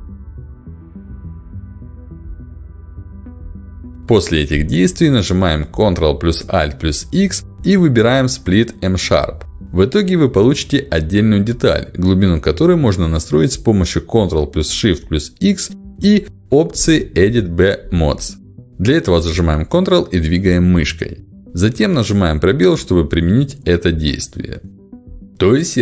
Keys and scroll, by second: 5.8 ctrl+alt+x, 13.7 ctrl+shift+x, 21.3 space.